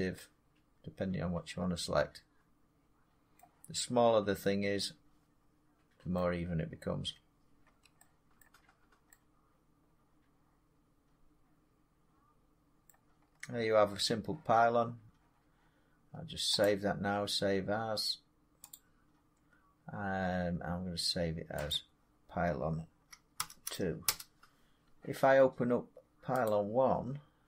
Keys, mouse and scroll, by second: 1.2-3.3 drag, 3.3 middle click, 6.0 middle click, 6.9 Tab, 7.6 Tab, 8.3 middle click, 8.5-8.8 scroll down 5, 12.1 scroll, 12.8 middle click, 13.1-13.5 scroll, 13.9-16.3 middle drag, 16.5 click, 18.6 click, 21.6 click, 24.0 Return, 25.3-26.7 drag, 26.8 click.